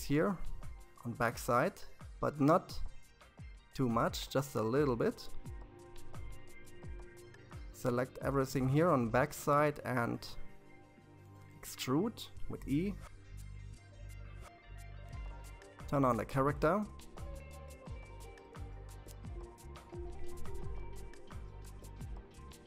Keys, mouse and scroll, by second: 2.1-4.9 scroll down 2, 4.9 c, 9.6 e, 15.2 click, 16.3-17.5 scroll down 5, 17.8-20.9 scroll up 5.